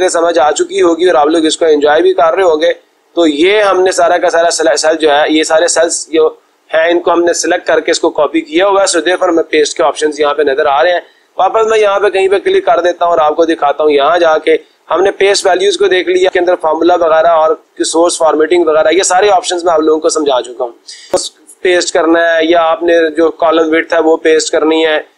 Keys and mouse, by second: 1.7 click, 4.4-5.5 drag, 11.1 click, 12.9 click.